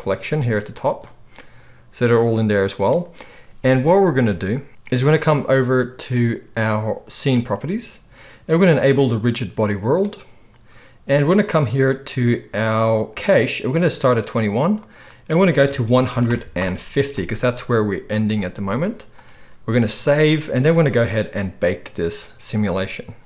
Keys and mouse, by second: 8.9-23.2 drag, 19.7 ctrl+s, 19.9 ctrl+s.